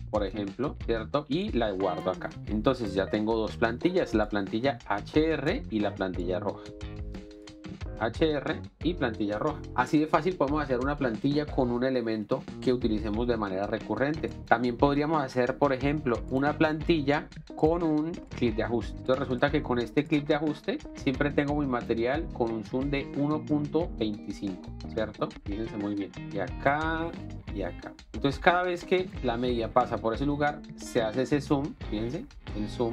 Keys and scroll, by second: 0.0-0.2 typing, 0.4 Return, 3.4 ctrl+x, 15.2 ctrl+x, 25.6 z, 29.1 alt+space.